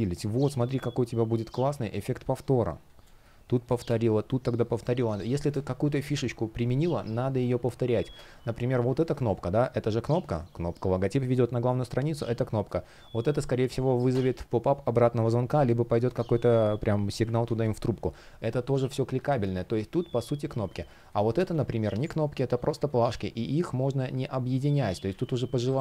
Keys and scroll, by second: 1.9 space, 8.7 shift+p, 16.0 super+z, 17.1 super+z, 19.1 super+z, 20.1 space, 22.8 shift+p, 24.7 super+z.